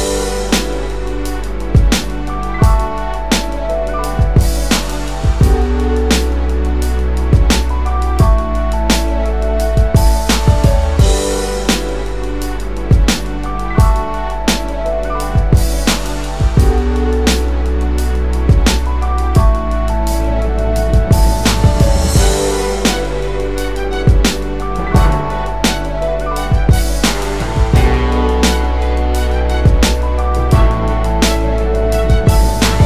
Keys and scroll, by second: 2.3 Delete, 2.9-5.1 space, 6.0 space, 15.5 Delete, 16.3 space, 26.3 space.